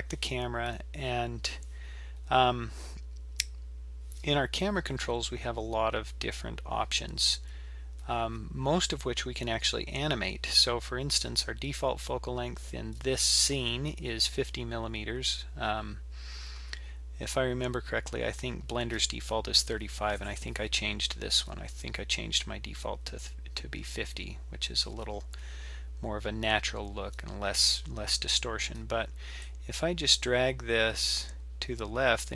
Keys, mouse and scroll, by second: 29.5-32.3 drag.